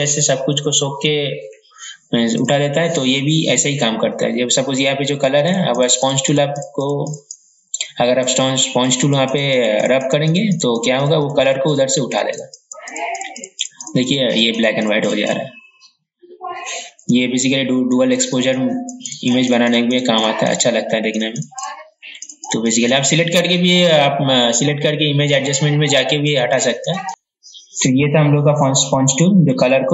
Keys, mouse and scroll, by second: 27.1 ctrl+alt+e, 28.6 click.